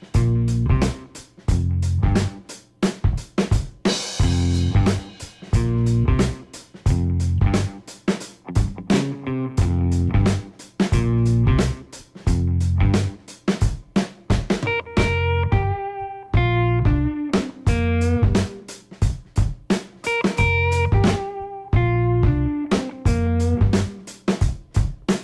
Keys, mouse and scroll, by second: 0.6 click, 2.0-4.7 drag, 5.3-12.1 drag, 13.2 click, 14.5 click, 15.9 click, 24.9 click.